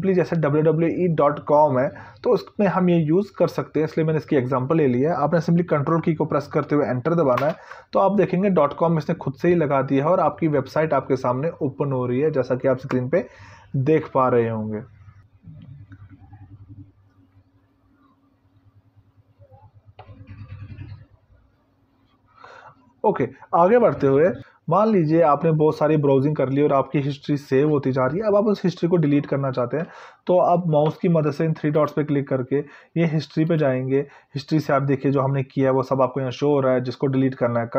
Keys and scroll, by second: 6.2 ctrl+Return.